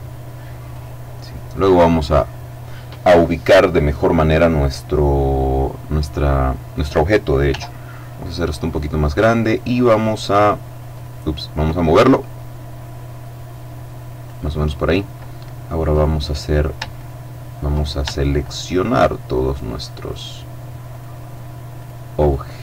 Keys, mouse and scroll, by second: 0.2 click, 5.5 right click, 6.9 s, 7.9 click, 9.2 click, 10.4 click, 11.1 click, 11.8-14.2 drag, 15.4 right click, 16.5 shift+right click, 17.9 right click, 19.0 right click, 20.4 right click, 21.3-22.6 right drag.